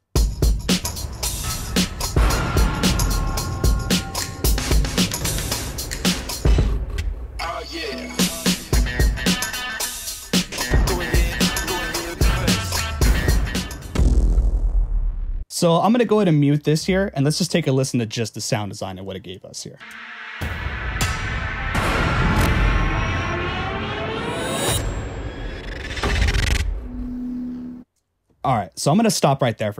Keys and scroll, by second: 0.1 space, 0.9 h, 3.8 t, 4.8-7.0 typing, 10.5 t, 11.5 h, 13.0-15.3 typing, 19.8 space, 27.8 space.